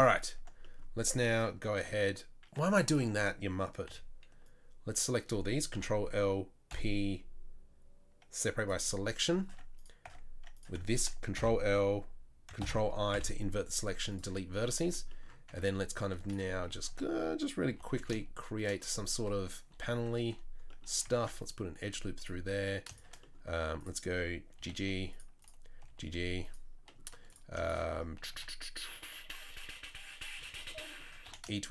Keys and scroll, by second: 2.6 1, 3.9 c, 5.7 ctrl+l, 6.7 p, 9.5 Tab, 10.1 Tab, 11.4 ctrl+l, 12.6 ctrl+i, 13.1 Delete, 14.8 Tab, 15.5 Tab, 16.9 a, 17.7 g, 21.1 ctrl+r, 24.6 g, 25.8 g, 28.3 a, 31.2 e.